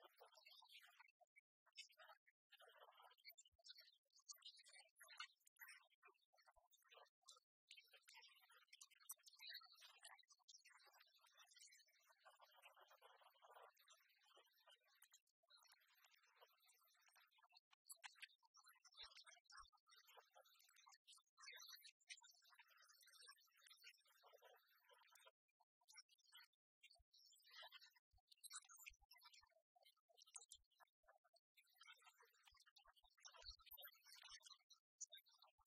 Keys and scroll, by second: 19.1 ctrl+j.